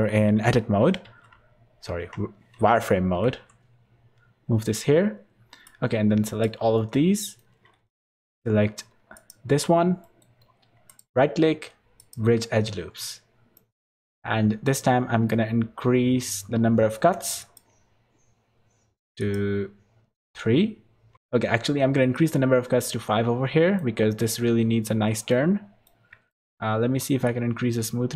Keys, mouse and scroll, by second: 1.0 shift+d, 4.9 scroll down 4, 5.6 click, 5.6 scroll down 2, 6.8 middle click, 7.4-8.2 scroll up 12, 9.1 alt+shift+click, 9.7 scroll down 4, 10.0 middle click, 10.4-12.1 scroll down 3, 10.9 right click, 12.5 scroll down 1, 17.4 click, 19.2 click, 22.8 middle click, 24.7-25.4 scroll up 4, 25.3 middle click, 26.3 shift+middle click, 27.2 click.